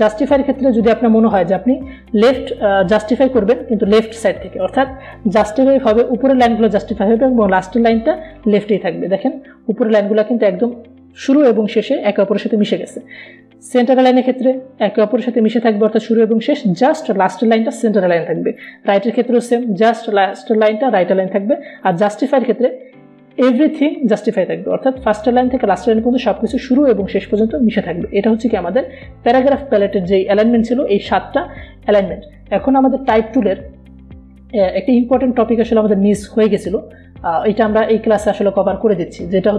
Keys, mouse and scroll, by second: 0.1 click, 9.5 click, 15.4 click, 20.0 click, 23.2 click, 29.3-32.5 drag, 32.5 Delete.